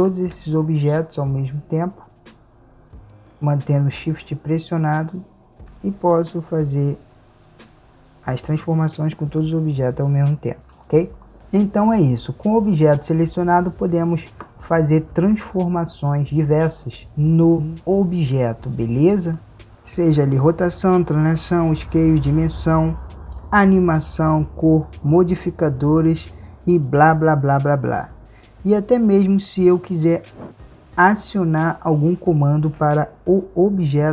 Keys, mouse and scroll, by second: 6.7 r.